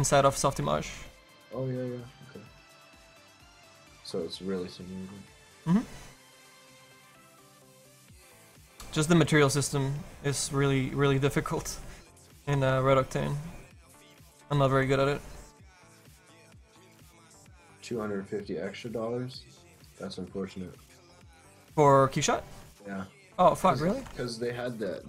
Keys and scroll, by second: 0.1 ctrl+z, 7.6 s.